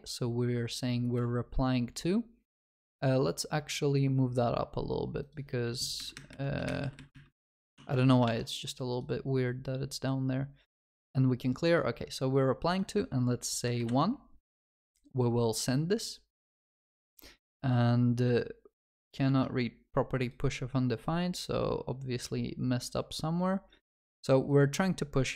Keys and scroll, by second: 6.7 alt+shift+Up.